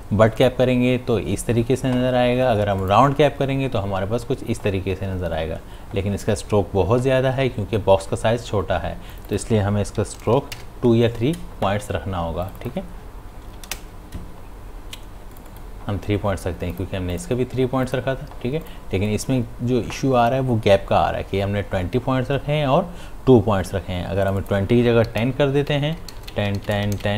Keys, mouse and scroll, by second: 0.4 click, 2.8 click, 9.1 click, 12.4 click, 15.3 click, 24.2 click, 25.7 Tab.